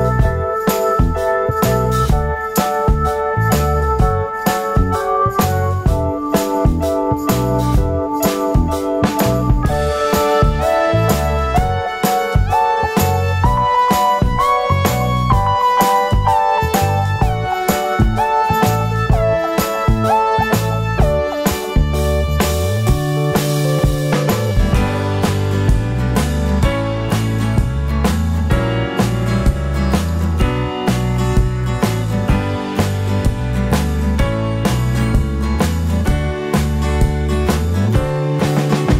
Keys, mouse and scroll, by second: 0.6 click, 1.2 middle click, 2.0 middle click, 2.2 F4, 2.9 alt+middle click, 5.3 scroll up 1, 5.9 q, 6.8 middle click, 6.8 scroll down 1, 6.9 middle click, 9.4 F3, 10.7 alt+middle click, 14.0 click, 16.9 click, 18.5 alt+click, 22.2 F3, 23.1 alt+middle click, 26.9 F3, 27.7 alt+middle click, 32.0 middle click, 32.5 alt+middle click, 34.3 scroll up 1.